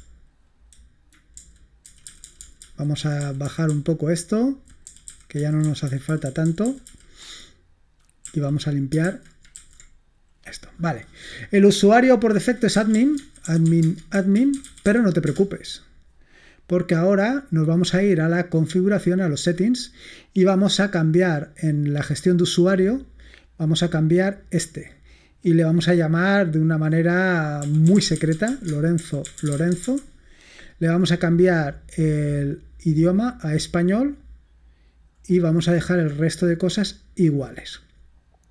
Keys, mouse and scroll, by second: 1.5 alt+super+j, 2.0 alt+super+j, 2.4 alt+super+j, 2.5 alt+super+j, 2.7 alt+super+j, 3.2 alt+super+j, 3.4 alt+super+j, 3.5 alt+super+j, 3.7 alt+super+j, 4.0-5.0 alt+super+j, 5.3 alt+super+j, 5.5 alt+super+j, 5.9 alt+super+j, 6.3-7.0 alt+super+j, 8.7 l, 9.1 super+h, 9.6 super+j, 12.6-15.1 typing, 15.3 Return, 18.8 click, 21.7 click, 22.3 click, 24.9 click, 26.4 click, 27.4-30.7 typing, 31.6 click, 33.2-34.2 drag, 34.2-34.6 scroll down 1, 37.5 click.